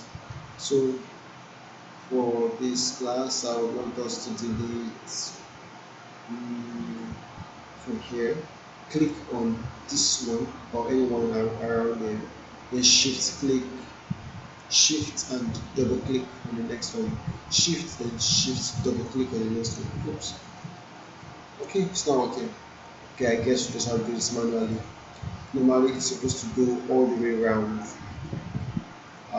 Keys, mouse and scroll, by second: 0.5-7.1 alt+drag, 13.0 shift+Num_Lock, 13.0 click, 15.8 shift+click, 17.5 click, 18.8 shift+click, 20.3 click, 21.0 shift+click, 23.2 shift+click, 27.0 alt+middle click, 28.2 shift+click.